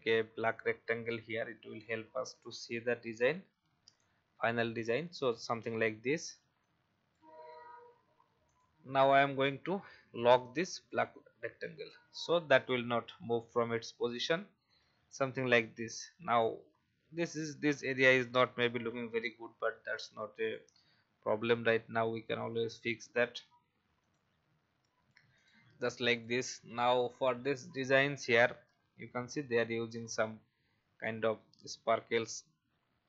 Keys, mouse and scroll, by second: 2.9 ctrl+x, 3.4 ctrl+b, 4.4 ctrl+v, 6.6 alt+shift+click, 9.2-9.7 scroll down 1, 10.2-10.8 scroll down 1, 10.8 click, 13.2 alt+scroll up 1, 13.9-14.2 scroll up 1, 14.6-15.7 drag, 24.0 click, 25.3 click, 29.0 alt+scroll down 1, 30.0-30.4 scroll up 1, 31.1 alt+scroll up 1.